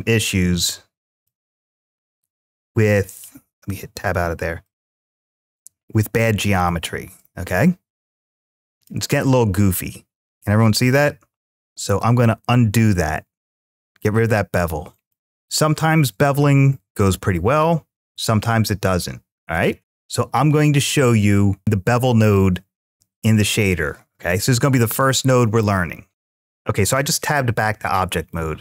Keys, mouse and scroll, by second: 0.4 click, 1.1-3.2 middle drag, 3.7 Tab, 4.5-9.5 middle drag, 10.2-11.4 middle drag, 12.0 ctrl+z, 14.4 click, 14.9-19.8 middle drag, 26.1 Tab, 26.1 click, 26.3-28.5 middle drag.